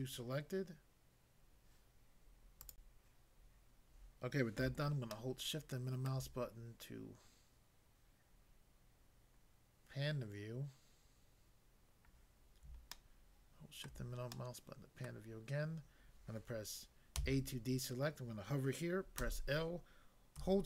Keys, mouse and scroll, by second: 2.6 click, 2.7 click, 5.1 shift+middle click, 12.9 shift+middle click, 17.2 a, 19.2 l.